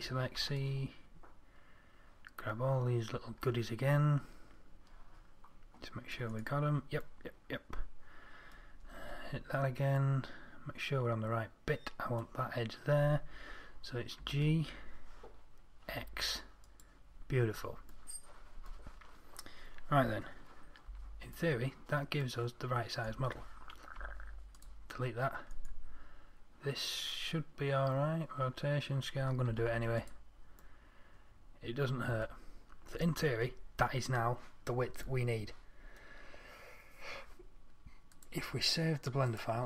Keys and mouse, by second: 0.7 c, 9.3 z, 14.5 g, 21.2 Tab, 24.3 Delete, 29.8 ctrl+a.